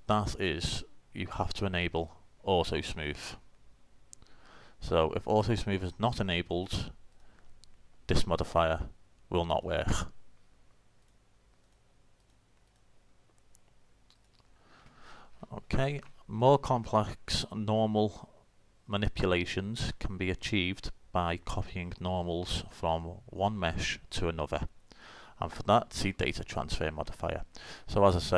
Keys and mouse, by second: 1.8 middle click, 2.0 click, 3.9 middle click, 7.2-16.0 drag, 16.2-24.8 middle drag, 28.2-28.3 drag.